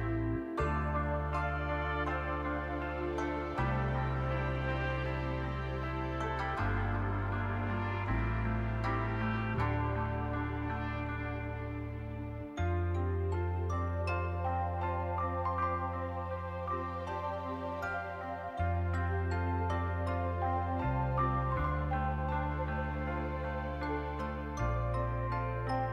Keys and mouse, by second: 0.4 middle click, 0.9 middle click, 1.8 shift+click, 2.2 click, 3.3 middle click, 3.7 shift+middle click, 4.0 middle click, 4.4 shift+middle click, 5.0 middle click, 6.1 shift+click, 6.4 middle click, 7.0 shift+click, 7.5 shift+click, 7.8 click, 8.2 click, 9.0 click, 9.5 shift+click, 10.0 shift+click, 10.3 click, 11.0 shift+click, 12.4 right click, 13.0 click, 13.6 middle click, 14.0 middle click, 14.8 shift+click, 15.3 middle click, 16.0 shift+click, 16.2 click, 16.6 shift+click, 16.8 click, 17.8 shift+click, 18.0 click, 19.1 shift+click, 19.4 click, 20.1 click, 20.9 click, 21.2 shift+middle click, 21.4 middle click, 22.4 shift+middle click, 22.8 middle click, 24.4 click, 25.4 click, 25.7 shift+click.